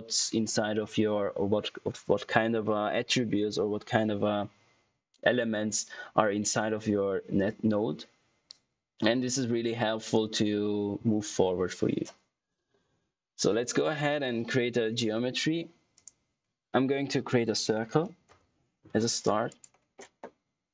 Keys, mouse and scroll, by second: 15.9 right click, 17.1-18.3 typing, 19.4 click.